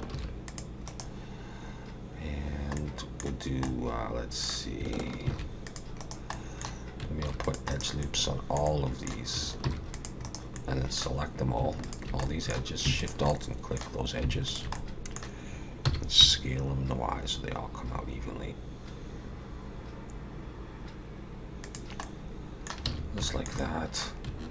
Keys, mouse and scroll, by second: 0.1 ctrl+r, 2.8 middle click, 3.7 middle click, 5.3 ctrl+r, 6.3 middle click, 7.2 ctrl+r, 8.0 middle click, 8.7 middle click, 9.6 ctrl+r, 10.6 middle click, 11.8 alt+shift+click, 12.2 middle click, 13.0 alt+shift+click, 13.3 middle click, 14.5 alt+shift+click, 14.7 middle click, 15.8 s, 22.0 middle click, 22.9 alt+a, 23.3 shift+middle click, 23.6 middle click.